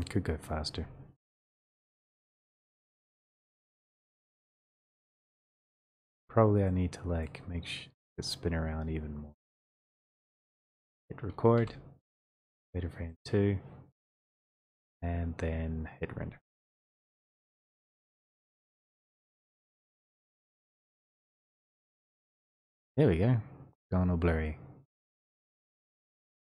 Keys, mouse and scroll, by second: 0.0 click, 7.3 middle click, 7.9 e, 9.8 click, 11.5 click, 14.0 click, 14.0 middle click, 16.6 F12, 16.6 click.